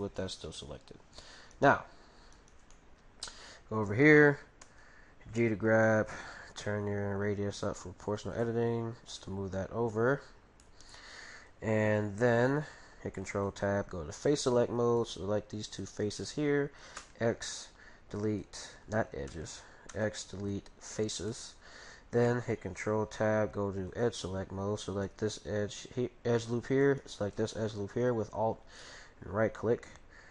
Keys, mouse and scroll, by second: 0.2-4.1 right drag, 2.7-4.5 middle drag, 4.7 middle click, 4.7 g, 8.4-10.3 drag, 9.2-12.6 middle drag, 13.2 ctrl+t, 15.0-17.4 right drag, 16.2-17.9 middle drag, 17.0 x, 19.2 ctrl+z, 19.9 x, 21.3-23.1 middle drag, 22.6 ctrl+t, 23.5 ctrl+t, 24.0 ctrl+t, 24.9-26.7 right drag, 26.8-28.5 right drag, 27.5-30.3 middle drag.